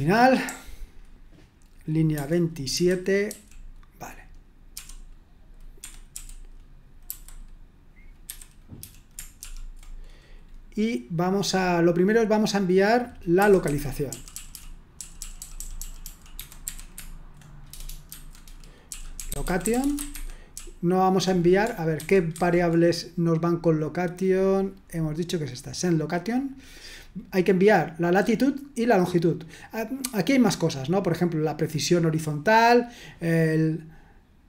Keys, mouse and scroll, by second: 0.0-1.0 typing, 2.1-3.3 typing, 4.7-7.1 typing, 8.3-9.9 typing, 13.4-16.7 typing, 18.1-21.2 typing, 20.1 Escape, 22.0 super+1, 22.3 super+2, 26.3 click.